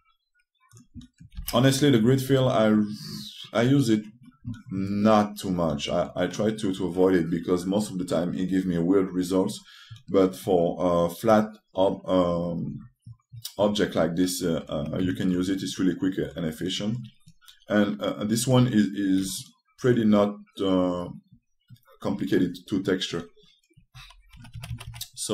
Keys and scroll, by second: 0.4 g, 2.1 r.